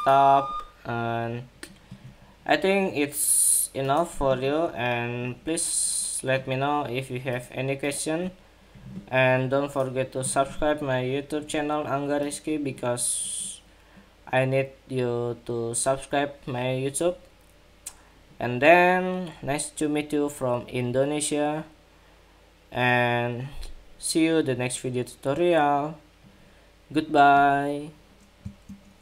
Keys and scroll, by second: 28.8 shift+super+2.